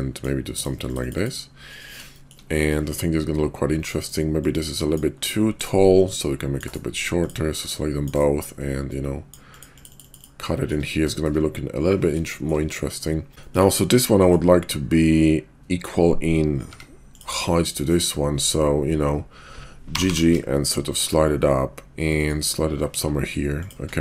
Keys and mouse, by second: 2.3 shift+click, 4.4-4.9 drag, 6.0-6.6 drag, 7.2 shift+click, 7.6-8.1 drag, 8.9-9.3 drag, 10.2 click, 10.6 shift+click, 11.1 shift+drag, 12.2 shift+click, 13.3 x, 13.5 shift+click, 16.6 Tab, 19.7 g.